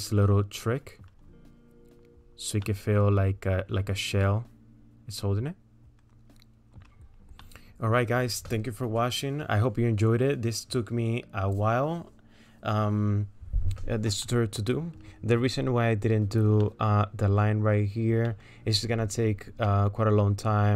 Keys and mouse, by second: 2.7-6.9 middle drag, 7.5 middle click, 14.3 middle click, 16.7 middle click, 18.4 middle click, 19.7 middle click.